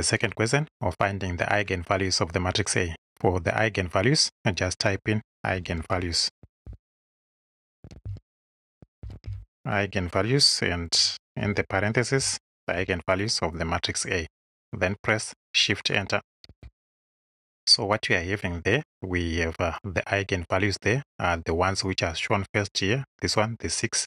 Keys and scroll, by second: 5.5-9.8 typing, 11.5 shift+9, 12.6 shift+a, 16.5 shift+Return.